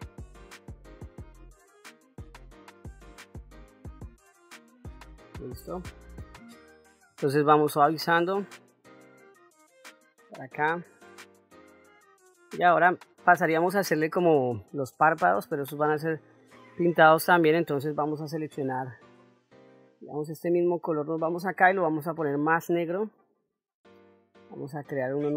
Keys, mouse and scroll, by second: 0.0 shift+middle click, 0.3 click, 0.6 middle click, 0.8 ctrl+middle click, 1.1 ctrl+shift+middle click, 1.3 click, 1.7 middle click, 2.0 click, 2.4 click, 2.7 middle click, 2.9 click, 3.9 middle click, 4.2 click, 4.9 middle click, 6.4 click, 7.5 click, 9.1 ctrl+middle click, 9.9 ctrl+middle click, 10.6 shift+middle click, 11.1 middle click, 11.9 shift+middle click, 13.1 ctrl+middle click, 17.2 click, 20.0 click, 21.5-23.2 drag, 24.8 click.